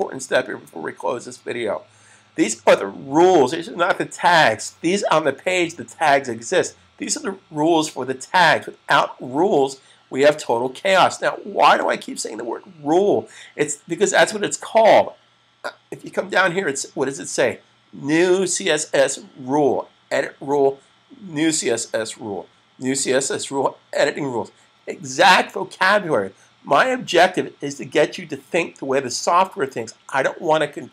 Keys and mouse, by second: 0.0 click, 11.7 click.